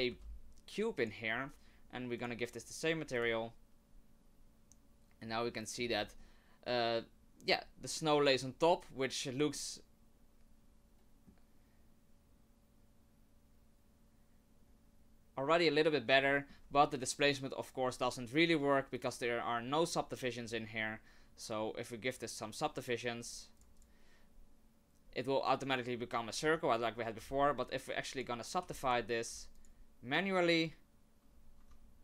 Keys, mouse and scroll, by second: 0.1 g, 2.2 click, 5.4 shift+middle click, 6.1 scroll up 2, 8.7-9.0 scroll down 2, 9.5 middle click, 16.3 shift+middle click, 16.7-17.4 scroll up 1, 17.4 scroll up 1, 18.9 click, 19.9 click, 23.6 click, 23.8 click, 26.4 Tab, 27.2 w, 28.6 w, 29.2 w, 31.9 Tab.